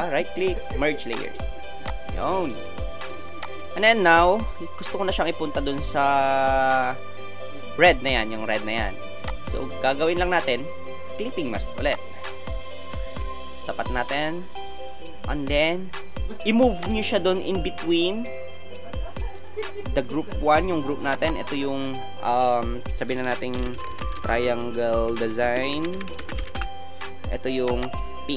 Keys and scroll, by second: 23.5-26.4 typing, 26.5 Return.